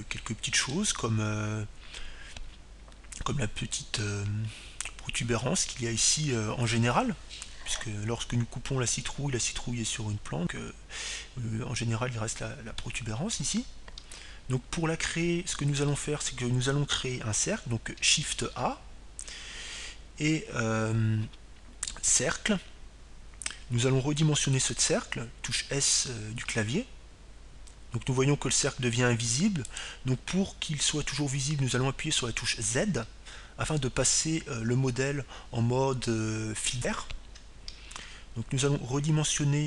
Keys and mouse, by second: 1.3-3.2 middle drag, 15.2-16.8 middle drag, 16.5 KP_3, 16.9 middle click, 18.1 KP_7, 20.7 shift+a, 28.8 s, 32.0-34.2 drag, 35.2 z.